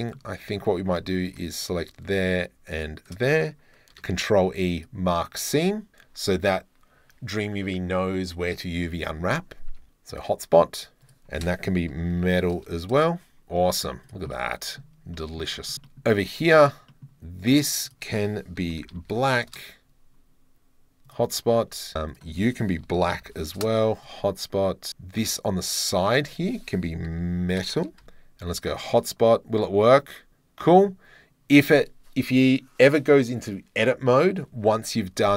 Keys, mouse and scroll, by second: 0.0 middle click, 0.4 Tab, 0.7 2, 1.3 alt+click, 2.7 alt+shift+click, 4.0 ctrl+e, 9.8 Tab, 10.1 click, 11.1 click, 13.0 middle click, 13.7 click, 13.7 middle click, 14.1 click, 14.3 middle click, 15.2 middle click, 15.7 shift+middle click, 15.9 middle click, 16.5 middle click, 16.9 click, 17.9-19.5 drag, 21.1 click, 22.1-23.7 drag, 26.1-27.8 drag, 27.8 BackSpace, 28.0 middle click, 29.6 middle click, 30.9 middle click.